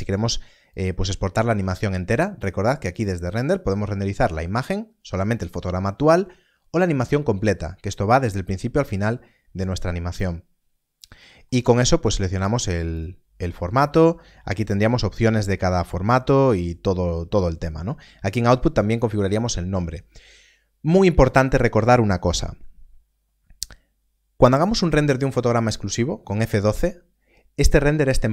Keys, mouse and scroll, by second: 0.6 click, 2.9 click, 11.1 middle click, 14.6 click.